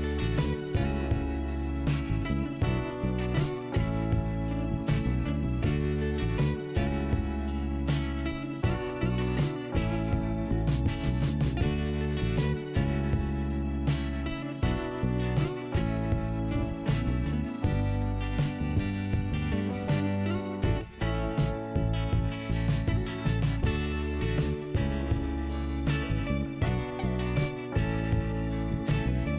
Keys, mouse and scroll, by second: 0.0 scroll up 1, 2.2-3.0 scroll down 1, 3.0 click, 5.3 click, 7.1 click, 9.4 scroll down 1, 10.3-10.7 scroll up 2, 12.1 click, 13.2 click, 13.5 click, 15.6 i, 16.6 scroll up 1, 18.0 click, 19.9 click, 20.9 click, 24.7 click, 25.9 click, 28.3 scroll down 1.